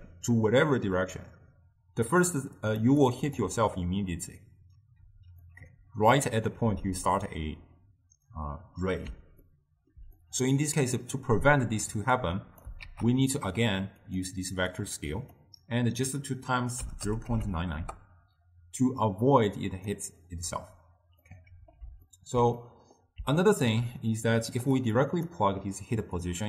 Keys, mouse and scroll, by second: 2.4-2.9 drag, 2.9 d, 2.9 d, 3.1 click, 3.4-5.1 d, 5.6-8.6 middle drag, 9.4 scroll up 2, 9.5-12.3 ctrl+middle drag, 12.3 click, 12.9 shift+d, 14.8 drag, 16.0-17.5 drag, 17.5 9, 19.1 drag, 21.4-24.7 middle drag, 24.7 click, 25.1-26.4 drag.